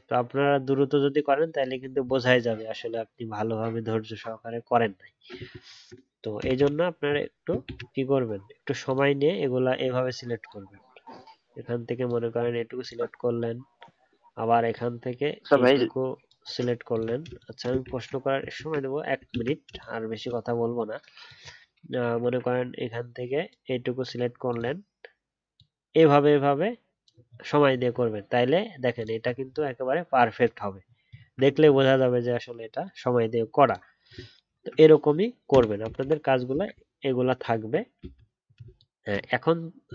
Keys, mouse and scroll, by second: 4.9-6.1 alt+scroll down 1, 7.6 ctrl+z, 12.8 alt+click, 16.9 alt+click, 17.8 ctrl+z, 18.5 ctrl+z, 19.3 ctrl+z, 24.5 alt+click, 27.2 alt+scroll down 1, 27.7 alt+scroll up 1, 29.0 alt+click, 29.4-30.0 alt+scroll down 1, 30.0 alt+scroll up 1, 30.8 alt+scroll down 1, 31.6-32.4 alt+scroll down 2, 32.4-32.8 alt+scroll down 1, 32.8-34.1 alt+scroll up 1, 34.1-34.4 alt+scroll down 1, 37.4-38.1 alt+scroll up 1.